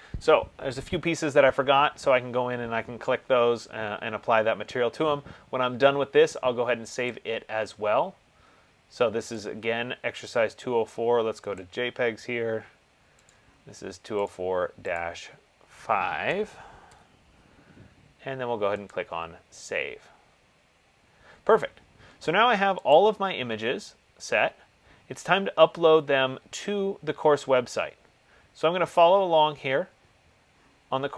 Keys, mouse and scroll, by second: 7.3 click, 9.6 click, 11.8 click, 13.5 click, 15.4 click, 16.4 BackSpace, 17.0 5, 19.1 click, 20.2 typing, 23.1 click, 24.6 middle click, 24.7 middle click, 25.7 middle click, 26.6 middle click, 26.8 middle click, 28.6 middle click.